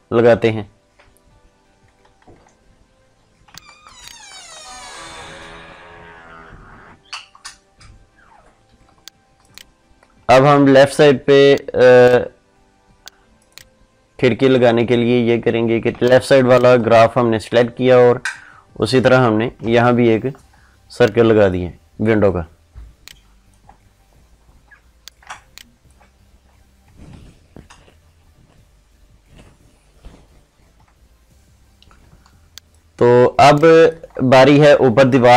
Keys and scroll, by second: 3.4 ctrl+space, 15.8 ctrl+space, 32.0 ctrl+space.